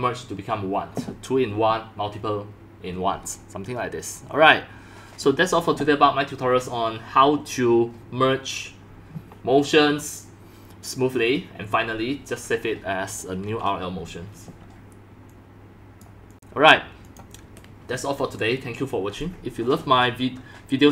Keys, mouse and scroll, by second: 13.1 drag, 15.3 click, 16.3 click, 17.0-20.9 drag.